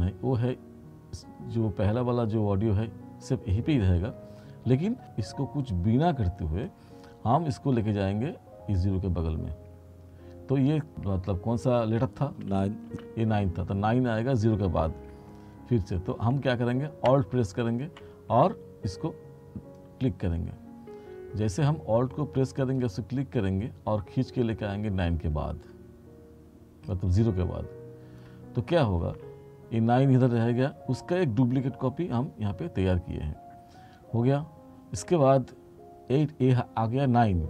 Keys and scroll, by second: 12.4 space.